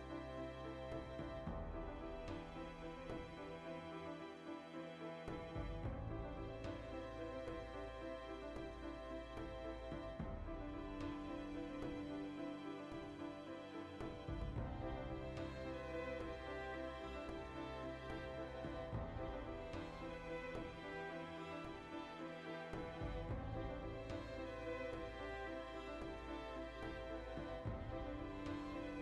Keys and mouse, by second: 0.2 middle click, 0.9 b, 1.2 shift+middle click, 3.5 Tab, 3.6 middle click, 4.7 ctrl+middle click, 4.9-6.3 right drag, 6.3 l, 6.6-8.5 shift+middle drag, 7.5 l, 8.5-9.9 alt+right drag, 9.9 ctrl+KP_Add, 11.0 alt+o, 11.3 z, 11.4-13.3 shift+middle drag, 12.0 z, 13.3 click, 13.5 s, 14.9-19.0 middle drag, 15.2 z, 17.3 ctrl+r, 18.1 right click, 18.3 ctrl+r, 19.0 alt+shift+right click, 19.5 g, 20.6-23.4 middle drag, 22.9 alt+h, 23.4 right click, 23.8 l, 24.6 middle click, 24.8 g, 25.2 right click, 25.5 middle click, 25.9 g, 26.2 right click, 26.7 alt+o, 26.8 ctrl+shift+middle click, 27.5 g, 27.8 click, 28.8 middle click, 28.8 s.